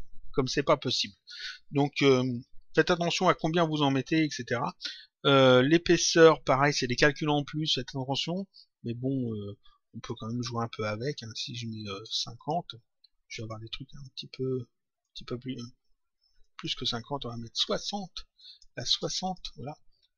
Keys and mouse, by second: 0.9 click, 3.2 Return, 10.1 click, 12.3 click, 16.3 click, 18.3 click.